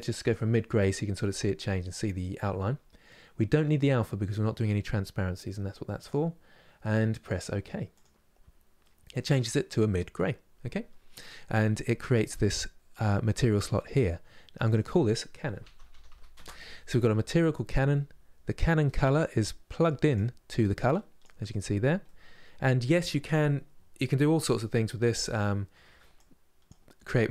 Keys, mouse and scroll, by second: 8.5-16.1 middle drag, 16.1-20.2 drag.